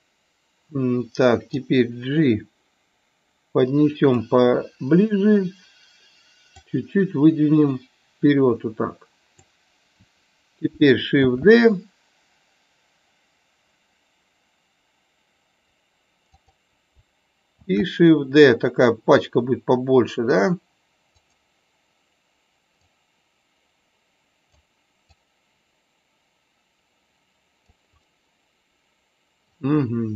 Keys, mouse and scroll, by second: 1.6-4.1 drag, 6.6-9.4 drag, 11.3 shift+d, 16.3 click, 17.8 shift+d, 22.9-24.5 drag, 25.0-27.6 drag, 28.0-29.5 middle drag.